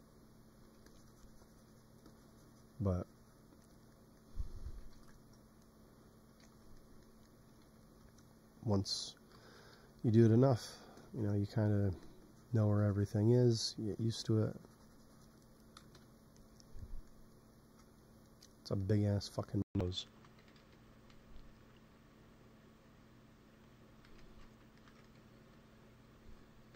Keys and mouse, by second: 0.5 f, 3.5-4.6 drag, 4.6 ctrl+z, 4.8 ctrl+z, 6.3 ctrl+z, 7.5 x, 9.2 i, 9.6 f, 10.7-12.2 drag, 11.8 f, 13.4 click, 13.8 f, 14.2-15.8 drag, 15.8 KP_1, 20.3 g, 20.5 f, 21.0 f, 21.4-24.0 drag, 24.0 p, 24.1 click, 25.2 f, 25.7-26.7 drag, 25.8 f.